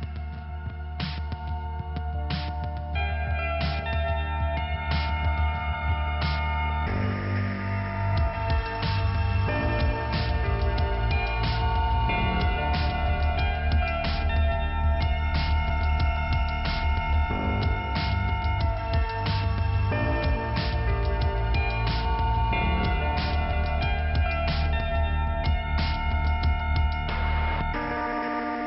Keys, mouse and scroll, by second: 1.3 click, 3.2-3.9 scroll up 2, 4.6 click, 4.9 scroll down 2, 10.2 click, 10.8 right click, 11.4 click, 11.5 click, 12.7 click, 14.1 right click, 14.6 click, 14.8 click, 16.1 click, 17.1 click, 18.2-19.3 scroll up 2, 19.5 click, 20.0 click, 20.4-20.9 scroll down 1, 20.9 right click, 21.3-22.3 scroll up 1, 22.3 click, 23.4 click, 25.5 click, 25.6 click, 26.5 click.